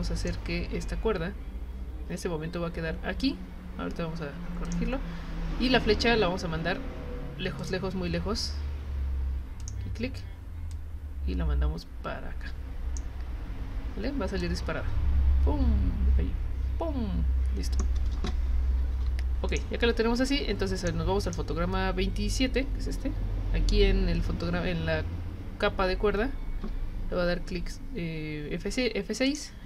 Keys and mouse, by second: 0.2 click, 4.6 click, 7.6 click, 9.6 click, 10.7-12.9 drag, 14.4-17.8 drag, 19.5 click, 20.2 click, 21.2 click, 26.6 F6, 29.3 click.